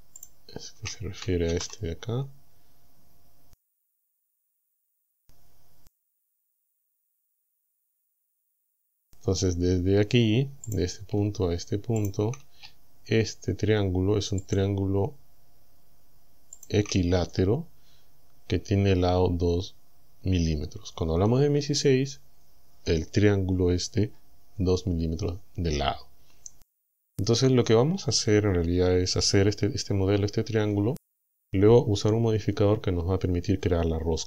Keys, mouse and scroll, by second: 0.2 shift+click, 1.5 ctrl+z, 7.9 click, 10.7 click, 12.0 shift+click, 14.5 shift+click, 16.6 shift+click.